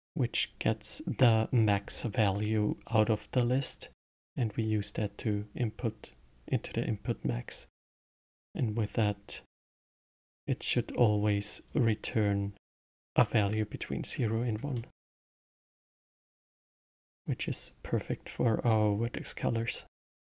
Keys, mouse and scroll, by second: 3.0 click, 7.9 click, 8.5-9.8 drag, 9.8-10.9 middle drag, 10.9 click, 11.6-14.7 drag, 14.7-15.5 middle drag, 15.5 click, 16.6 click, 17.5-19.6 drag.